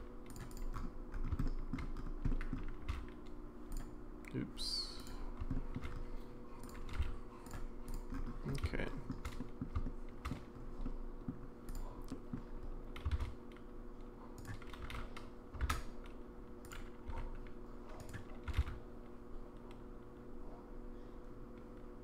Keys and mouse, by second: 0.5 click, 1.4 shift+middle drag, 2.3 middle drag, 2.9 z, 5.0 click, 5.5 shift+middle drag, 6.6 click, 6.9 g, 8.8-9.1 shift+middle drag, 9.4 middle drag, 9.8-10.3 shift+middle drag, 10.8-11.3 middle drag, 11.7 click, 12.1 middle click, 13.2 shift+d, 14.8 g, 17.1 r, 18.5 r.